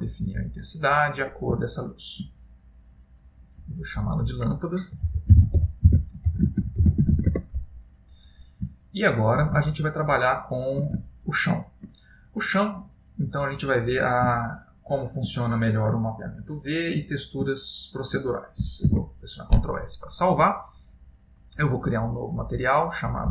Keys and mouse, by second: 1.8 shift+middle click, 2.7 middle click, 4.0 click, 9.0 shift+middle click, 9.7 middle click, 11.2 ctrl+middle click, 12.1 middle click, 13.5 click, 14.5 ctrl+middle click, 15.5 middle click, 17.7 ctrl+middle click, 19.2 ctrl+s, 20.9 middle click, 22.2 click, 23.2 click.